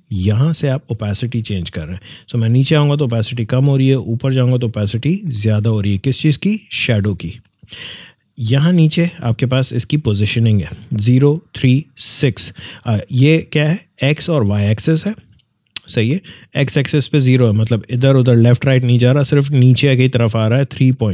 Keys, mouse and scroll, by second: 2.0-8.8 drag, 16.4 click, 20.8 click.